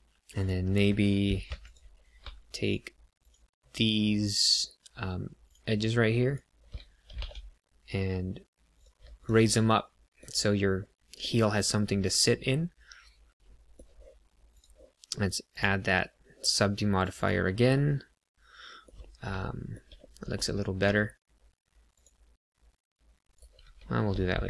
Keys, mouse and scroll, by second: 0.3 click, 1.4 2, 1.6 click, 2.5 shift+click, 3.2 click, 4.4 click, 5.4 shift+click, 6.2 shift+click, 7.1 g, 7.2 z, 8.7 click, 9.5 middle click, 10.8 middle click, 11.7 middle click, 14.4 click, 16.9 click, 17.1 click, 17.7 middle click, 19.4 shift+middle click, 19.9 middle click, 21.0 ctrl+r, 23.3 right click, 23.6 ctrl+z, 24.1 middle click.